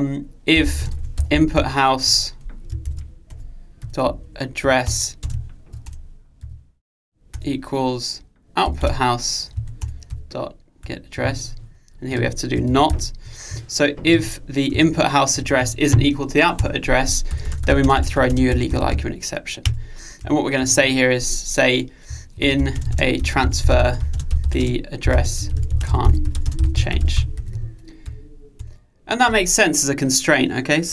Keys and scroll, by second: 2.1 Return, 19.9 Return.